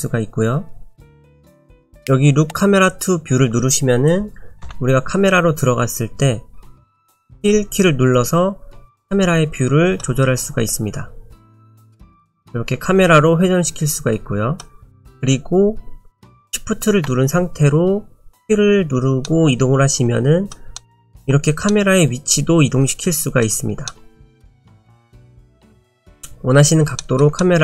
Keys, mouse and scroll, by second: 1.3 KP_0, 4.7 KP_0, 6.9 middle click, 7.2-8.6 scroll down 4, 9.0 middle click, 10.3-11.2 scroll up 1, 11.2-11.6 scroll up 1, 11.6-12.0 scroll down 1, 12.4 middle click, 19.2 shift+middle click, 20.8 shift+middle click, 20.9 shift+middle click, 24.8 shift+middle click, 25.8 shift+middle click, 25.8 scroll up 1, 26.2-26.8 scroll down 1, 27.0 shift+middle click, 27.4 middle click.